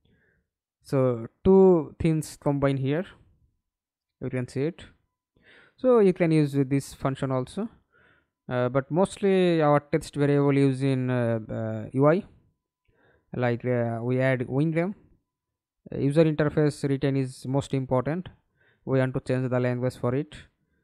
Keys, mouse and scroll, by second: 0.5-2.5 typing, 3.4 Escape, 3.9 middle click, 4.6 F11, 7.9 middle click, 8.4 ctrl+space, 15.0 double click, 16.8 right click, 17.4-18.5 scroll up 2.